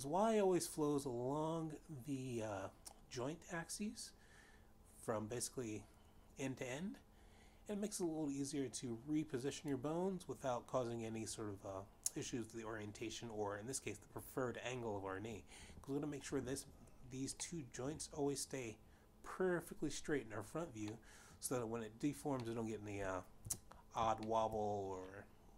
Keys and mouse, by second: 9.1 click, 18.1 middle click, 21.5 middle click, 23.0 middle click, 23.9 3, 24.7 shift+middle click.